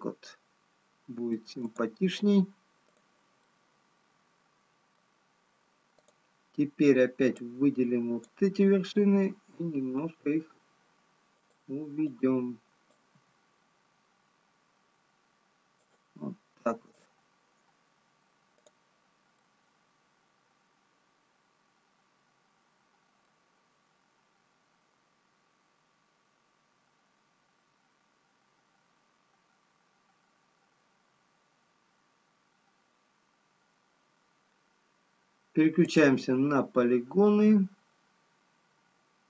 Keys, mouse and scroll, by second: 2.6 click, 3.8 middle click, 3.8 click, 9.6 g, 13.6 click, 17.5 click, 19.0 click, 20.1 middle click, 36.5 click.